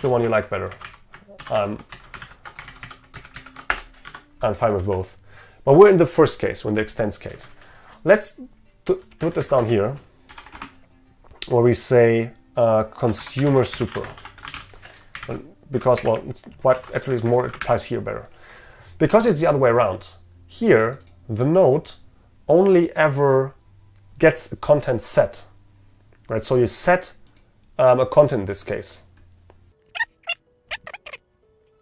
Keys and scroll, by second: 1.5 ctrl+y, 2.7 ctrl+shift+Right, 3.4 ctrl+shift+Left, 4.1 Escape, 16.9 ctrl+x, 17.7 ctrl+v.